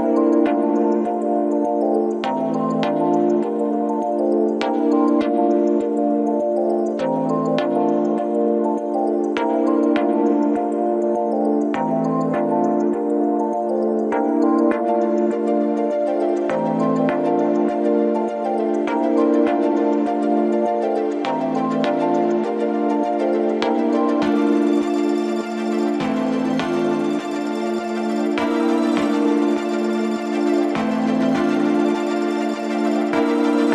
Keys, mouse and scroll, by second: 0.8-1.4 scroll down 3, 1.4-3.3 middle drag, 3.3 KP_1, 4.9 ctrl+alt+KP_0, 6.5 click, 9.7-16.1 drag, 16.8-25.3 drag, 25.3 g, 27.5 click, 28.0 scroll down 2, 28.7 s, 30.9 click, 32.5 click, 33.1-33.7 drag.